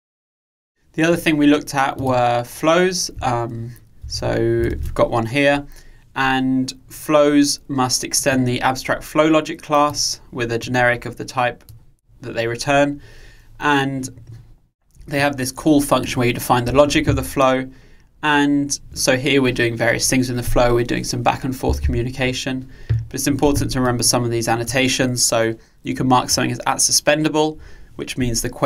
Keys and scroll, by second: 4.1 super+1.